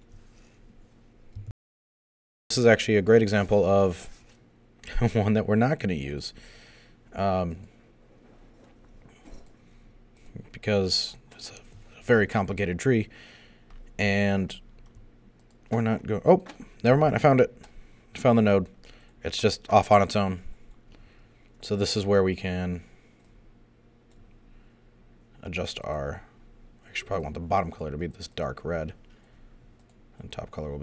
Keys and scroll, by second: 1.5 super+..